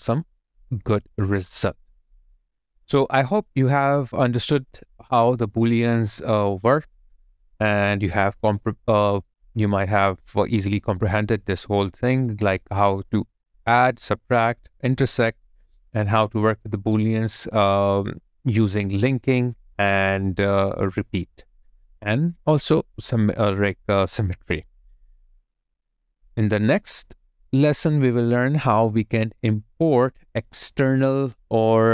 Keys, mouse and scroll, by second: 0.5 alt+middle click.